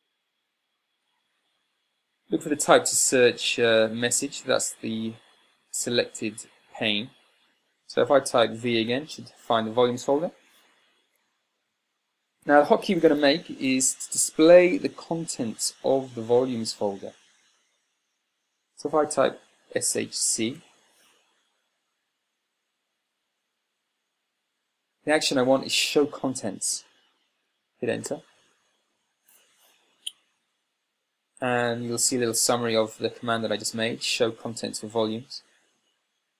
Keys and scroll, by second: 0.7 Tab, 9.3 v, 12.5 Tab, 20.4-21.2 typing.